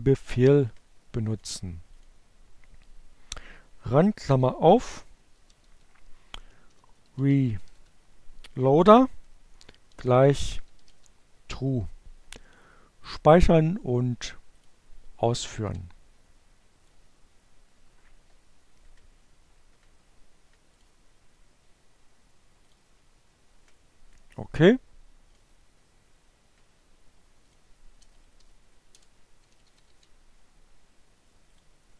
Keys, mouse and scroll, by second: 0.7 click, 3.3-6.8 typing, 8.3-9.9 typing, 11.9 click, 13.4 click, 14.2 ctrl+c, 14.8 ctrl+Up, 15.3 Return, 19.1 click, 21.2 click, 23.8 click, 26.1 click, 26.4-28.6 typing, 30.1 click, 31.4 click.